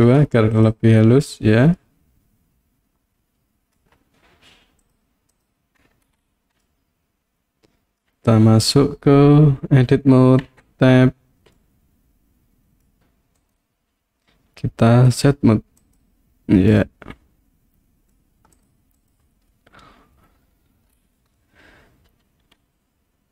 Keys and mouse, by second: 1.9-3.8 middle drag, 4.8 click, 5.3 click, 6.6-8.0 middle drag, 10.5 Tab, 11.6-12.9 middle drag, 13.4-16.0 right drag, 16.7-18.2 middle drag, 18.6 click, 19.1 click, 21.4-23.3 middle drag.